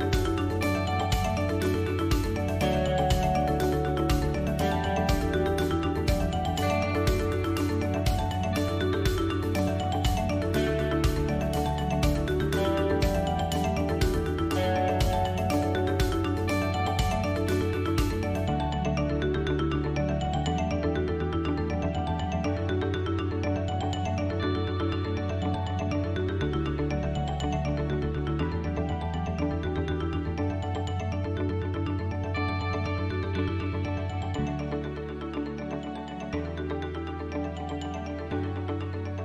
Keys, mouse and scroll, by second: 0.7 a, 6.8 ctrl+KP_Subtract, 8.8 a, 9.3 s, 11.0 g, 13.0 s, 14.3 g, 21.4 click, 21.8 click, 22.3 g, 24.3 g, 26.2 click, 27.9-29.0 drag, 29.0 s, 31.8 g, 34.7 s, 35.3 g, 36.1 s, 37.0 g, 38.0 Tab, 38.7-39.2 middle drag.